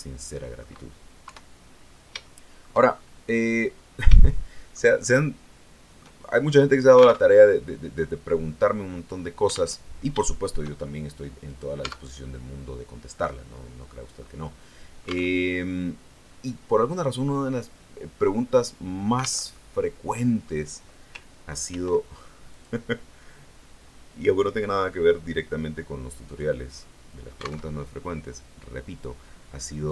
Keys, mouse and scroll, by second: 1.1 KP_3, 1.7-2.1 scroll down 1, 2.1 shift+middle click, 2.7-3.5 shift+scroll up 1, 3.5 scroll down 1, 4.1 shift+middle click, 5.0-6.1 shift+middle drag, 6.3-6.7 shift+scroll up 2, 7.1 alt+Tab, 9.7 alt+Tab, 10.2 shift+middle click, 11.0 click, 11.4 right click, 11.7 Tab, 12.1-15.3 middle drag, 15.3 alt+Tab, 19.3 alt+Tab, 19.5-20.5 alt+middle drag, 21.5 ctrl+r, 22.4 click, 26.1 click, 26.7 click, 27.5 alt+Tab, 29.5 click.